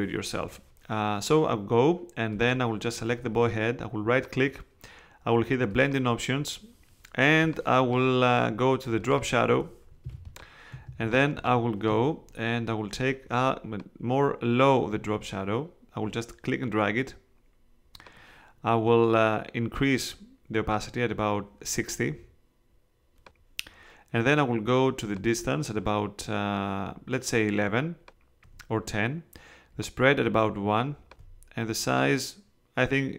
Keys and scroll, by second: 10.0 space.